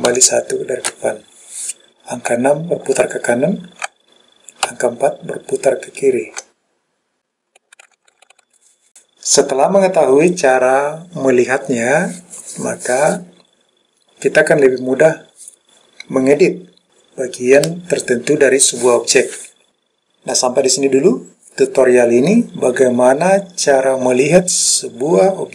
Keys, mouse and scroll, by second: 0.2 KP_1, 2.5-4.0 KP_6, 4.8-8.4 KP_4.